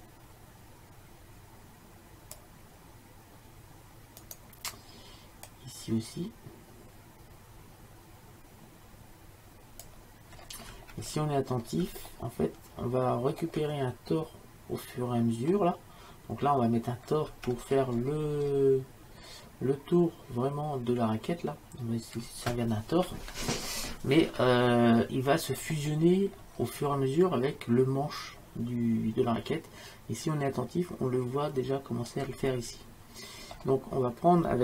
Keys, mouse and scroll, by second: 4.3-5.5 drag, 6.2-7.8 drag, 10.4-16.4 middle drag, 17.6-21.7 middle drag, 25.6 middle click, 32.6-34.6 middle drag.